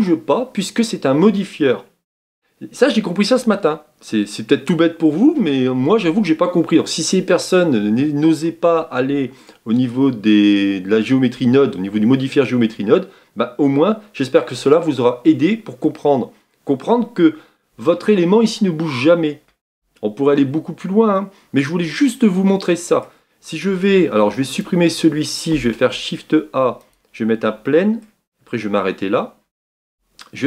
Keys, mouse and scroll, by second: 19.6 Tab, 20.5-21.2 scroll down 3, 21.2-23.2 middle drag, 23.2-24.4 scroll up 1, 24.6 x, 26.9 shift+a, 27.6-28.3 middle drag, 28.3-28.9 scroll up 5, 29.8 Tab.